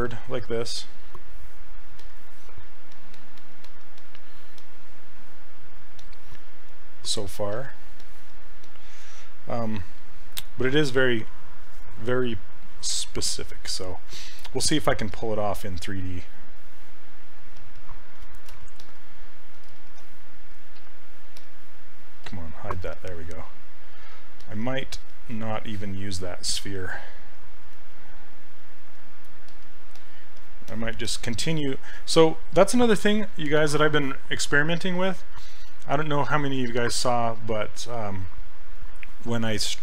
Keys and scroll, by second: 26.9 s.